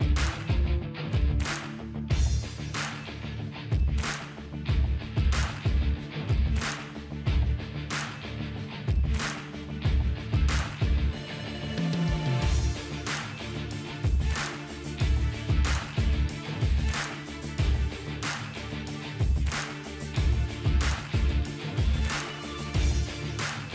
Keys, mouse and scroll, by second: 10.1 typing, 11.2-23.7 drag.